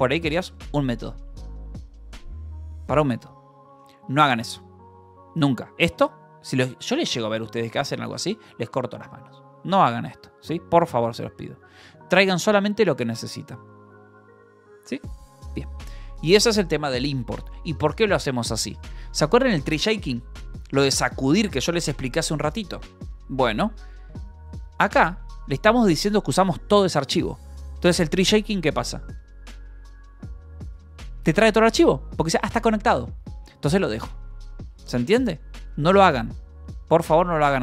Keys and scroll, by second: 0.1 k, 5.6 h, 6.5 shift+v, 6.6 Escape, 7.0 b, 8.2-10.4 typing, 9.1 Escape, 11.7 Escape, 18.8 Escape, 25.2 u, 25.8 shift+v, 26.1 Escape, 27.3 shift+v, 27.7 Escape, 35.0 Escape, 36.1 u.